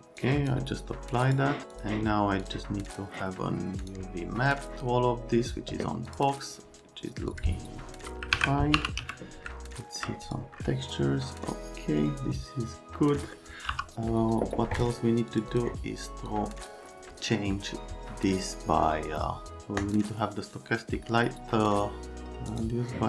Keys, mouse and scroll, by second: 8.3 alt+q, 8.5-9.5 typing, 9.5 alt+middle click, 10.3 click, 13.1 right click, 13.7 space, 15.3 click, 15.5 click, 16.3 click, 19.8 click, 22.5 click.